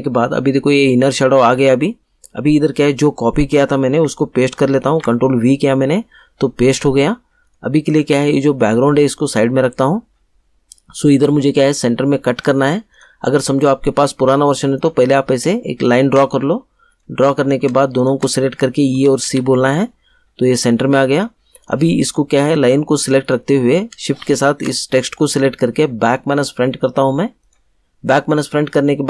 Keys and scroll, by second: 4.8 ctrl+v, 18.9 e, 19.2 c.